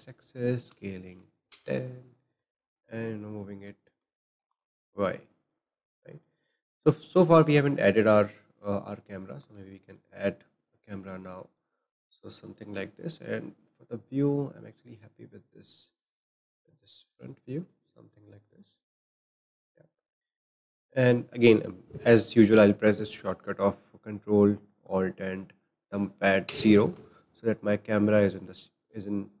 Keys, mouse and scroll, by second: 0.7 s, 2.1-2.6 scroll down 4, 2.6-4.0 shift+middle drag, 4.0 g, 5.9-6.2 scroll down 1, 6.2-6.8 middle drag, 6.8-7.3 scroll up 2, 7.3-9.4 shift+middle drag, 9.4 shift+a, 13.0 shift+middle click, 13.4-14.4 scroll up 8, 14.4-15.6 shift+middle drag, 15.6 scroll down 1, 15.8-18.7 shift+middle drag, 18.7-19.2 scroll up 1, 19.2-22.5 shift+middle drag, 26.5 ctrl+alt+KP_0, 29.0 click.